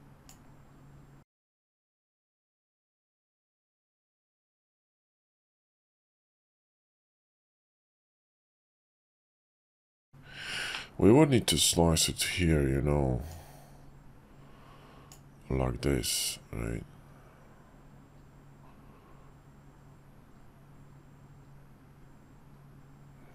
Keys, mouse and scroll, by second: 6.4 ctrl+z, 6.9 shift+drag, 9.2-9.8 middle drag, 10.7-12.3 middle drag, 13.3-23.3 drag.